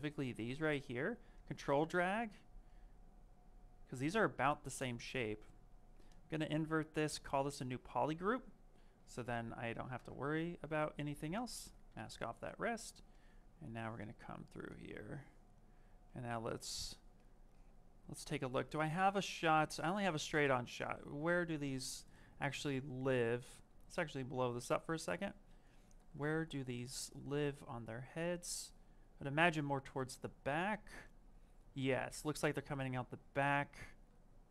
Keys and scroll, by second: 8.0 q.